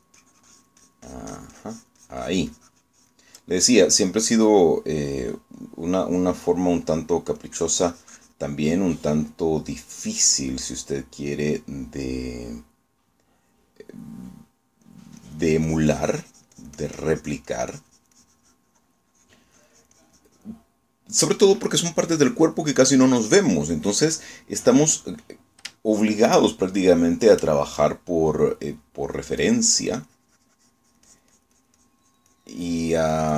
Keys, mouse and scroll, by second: 8.5-9.6 drag, 14.7-16.1 drag, 16.3-20.6 drag, 20.7-21.7 drag, 26.9 shift+middle click, 27.5 shift+middle click, 30.5 click, 30.9-33.3 drag.